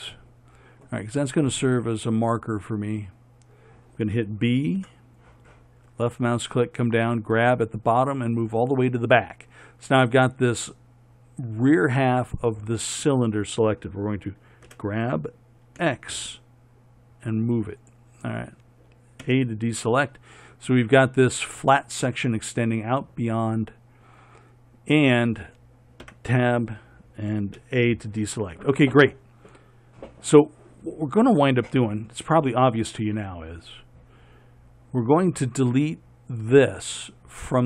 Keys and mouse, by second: 1.6 middle click, 5.0 b, 14.9 g, 19.5 a, 26.3 Tab, 27.9 a.